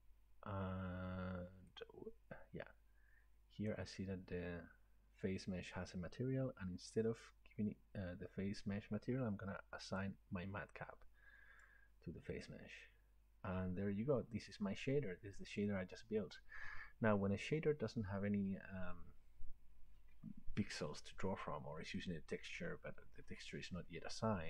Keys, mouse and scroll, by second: 3.7 click, 4.9-8.7 drag, 11.6-16.7 drag.